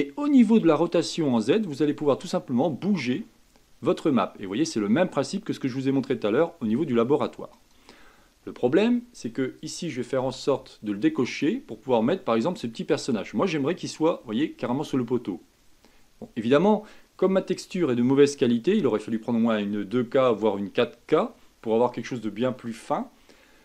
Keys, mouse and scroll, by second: 1.7-4.4 drag, 9.7 click, 11.3-12.4 drag, 12.4-15.8 middle drag.